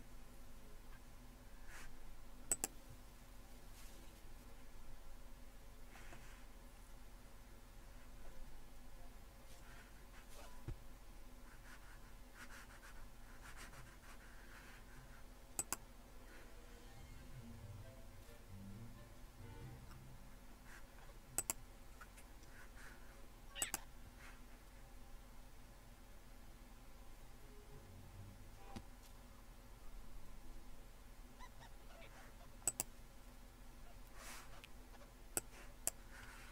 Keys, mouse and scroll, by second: 2.5-4.3 drag, 15.6-17.1 drag, 21.4-24.8 drag, 32.7-34.2 drag, 35.4-36.5 drag.